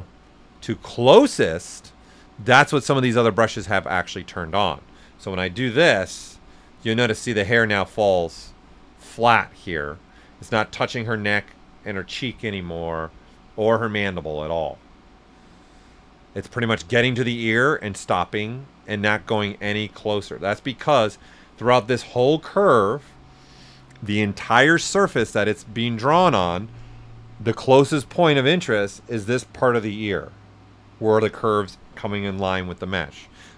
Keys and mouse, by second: 5.2 click, 6.4-8.3 right drag, 8.3-11.1 right drag, 10.7 typing, 19.1 right click, 19.1 typing, 20.4 r, 26.9-30.0 right drag, 26.9 typing, 29.4-30.2 typing.